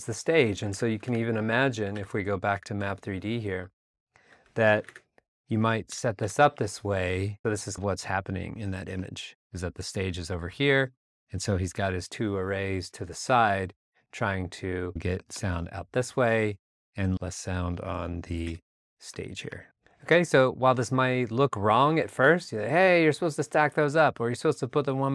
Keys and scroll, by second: 0.8 alt+Tab, 1.8 super+Tab, 4.8 alt+Tab, 5.9 alt+BackSpace, 7.2 r, 13.2 a, 14.8 a, 17.0 super+z, 18.4 e, 19.5 super+Tab.